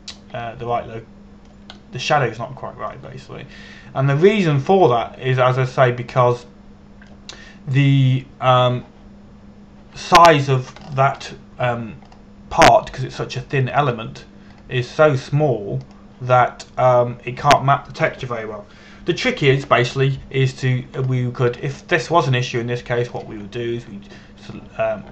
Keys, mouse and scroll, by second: 5.3-6.5 scroll down 1, 6.5 middle click, 12.5-12.9 scroll up 2, 13.3 Tab, 13.8 scroll up 1, 15.5 a, 16.2 right click, 17.5 click, 18.6 right click, 22.7 scroll up 1, 23.1 a, 23.4-24.8 scroll down 1, 24.8 click.